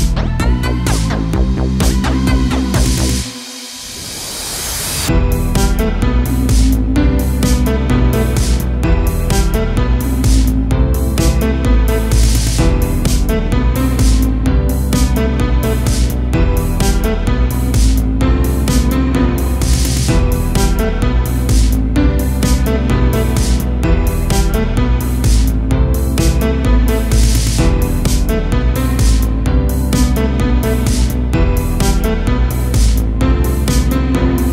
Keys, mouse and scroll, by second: 0.1-2.1 shift+middle drag, 2.1 l, 2.7 g, 4.7 r, 6.0 middle click, 6.7-7.2 scroll up 5, 7.2 shift+middle click, 7.6-8.0 scroll up 1, 8.0 g, 8.8 a, 9.0 a, 9.1-9.5 scroll down 2, 9.5-11.7 middle drag, 11.7 l, 12.3 KP_7, 12.9-13.4 scroll down 1, 13.4 shift+d, 13.8 g, 14.5 r, 16.5 shift+d, 17.0 g, 17.8 r, 18.6 middle click, 19.2-19.7 scroll up 4, 19.7 middle click, 20.6-21.4 scroll up 2, 21.4 r, 22.5 g, 23.7-25.9 typing, 27.0 g, 27.8 a, 27.9 a, 28.0-28.4 scroll down 1, 28.4-29.5 middle drag, 29.5-30.5 scroll up 2, 30.5-32.7 typing, 30.7-31.2 scroll up 1, 32.8-33.4 scroll down 5, 33.4 middle click, 34.1 KP_0.